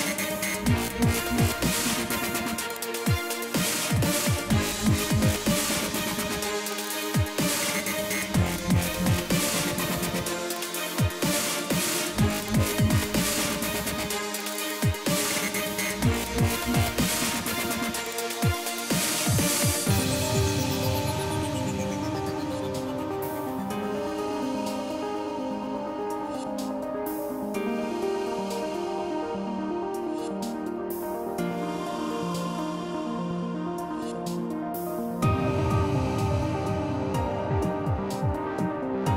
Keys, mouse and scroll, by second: 0.0 click, 0.9 click, 2.4 click, 2.9 click, 5.7 F1, 6.5 ctrl+d, 7.5 click, 7.8 click, 8.9 click, 10.6 click, 12.4 click, 13.9-16.0 click, 14.8 -, 15.0 -, 15.2 -, 15.8 -, 17.0 click, 22.8 click, 24.7 click, 25.2 F1, 27.2 click, 28.9 click, 31.0 click, 32.9 click, 33.4 click, 34.6 F2, 35.8 click, 37.2 click, 38.2 click, 38.3 click, 38.8 click.